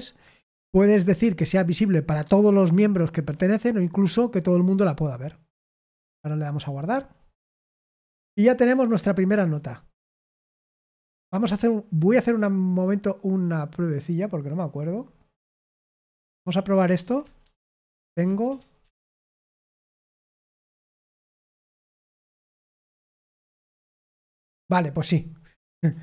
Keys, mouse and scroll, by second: 21.3 typing, 22.9-26.0 drag.